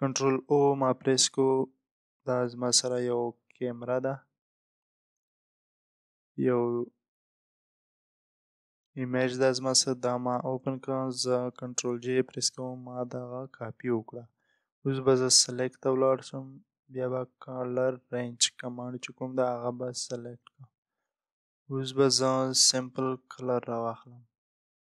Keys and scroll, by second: 0.1 ctrl+o, 3.4 Return, 11.2 Return, 11.7 ctrl+j.